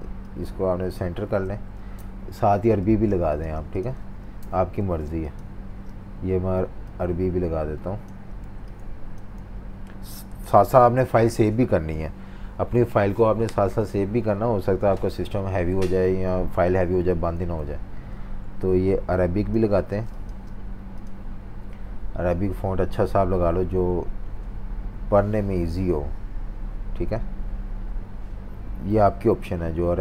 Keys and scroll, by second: 1.9 super+-, 2.1 super+-, 2.2 super+-, 2.9-6.1 typing, 8.4-9.4 typing, 10.4 super+s, 12.2 F18, 17.6 F19.